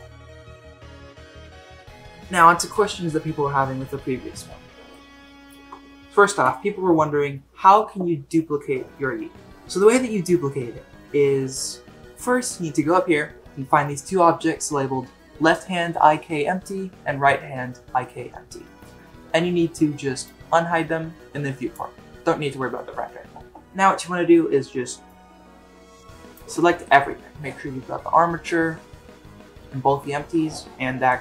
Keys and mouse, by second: 1.7 click, 4.9-5.5 shift+middle drag, 20.3 click, 25.1-26.4 drag.